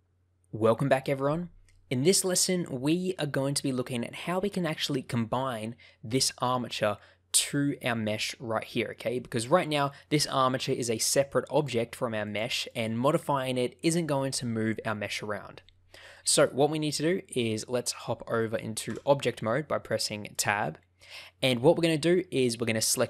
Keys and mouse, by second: 1.6-4.6 middle drag, 9.3 middle click, 10.9 click, 11.5 click, 12.2 click, 16.1 middle click, 17.3 middle click, 18.8 Tab, 19.8 click, 20.3 middle click.